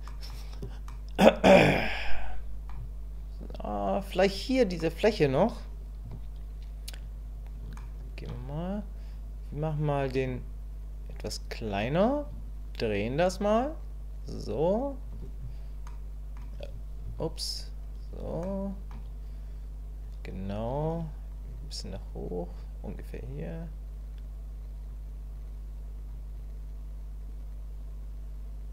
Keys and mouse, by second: 0.1 middle click, 0.9-2.7 middle drag, 4.8 middle click, 6.0 KP_1, 7.8 shift+middle click, 11.0 shift+click, 12.5-15.0 ctrl+drag, 15.9 click, 17.1 KP_1, 18.5 shift+click, 21.3-22.5 drag, 23.3-24.9 drag, 25.3 click, 26.3-28.7 drag.